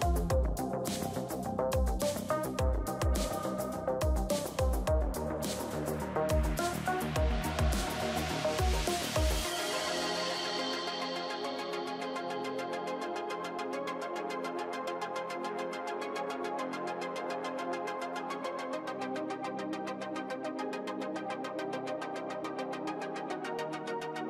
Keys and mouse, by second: 2.3 middle click, 3.2 c, 9.6 c, 10.8 click, 11.0 x, 11.9 ctrl+z, 12.3 x, 13.8 ctrl+s, 17.5-19.4 drag.